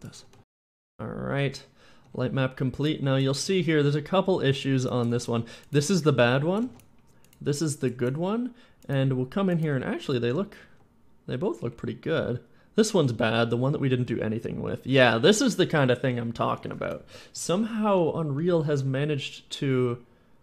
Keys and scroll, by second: 0.0-4.9 typing, 6.4 s, 6.5 d, 9.5 w, 10.0 w, 10.2 d, 11.6 a, 11.7 w, 13.7 w, 14.8 d, 14.8 w, 16.7 d, 17.1 w, 18.3-19.5 typing.